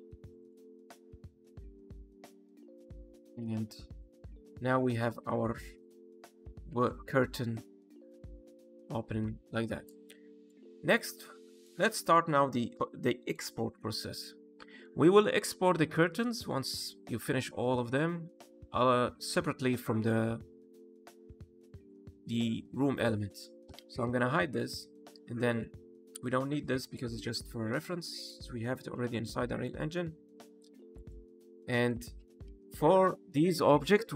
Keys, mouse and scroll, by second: 0.3 click, 1.8 click, 10.3 click, 10.6-10.9 scroll down 2, 10.9 middle click, 11.3 shift+middle click, 11.9 click, 12.6 middle click, 14.5 middle click, 23.6 h, 24.5 click, 24.7 h, 25.4 click, 26.0 h, 26.7 click, 27.1-27.7 scroll down 1, 27.8 h, 28.1 click, 28.3 h, 28.9 middle click, 30.8 click, 31.2 h, 31.5 middle click, 32.0 scroll up 1, 32.3 a.